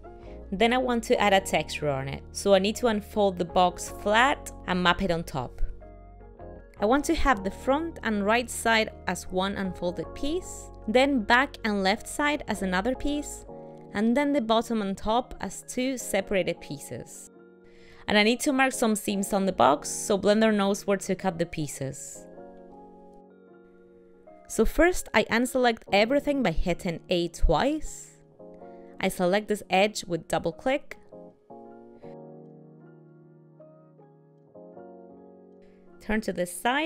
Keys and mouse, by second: 2.1 middle click, 6.6 middle click, 10.7 middle click, 14.1 middle click, 15.2 middle click, 16.0 middle click, 16.2 middle click, 18.1 middle click, 19.2 middle click, 24.0 shift+middle click, 26.6 a, 26.9 a, 28.8 shift+middle click, 29.7 middle click, 30.5 ctrl+middle click, 32.4 click, 32.7 click, 34.9 middle click.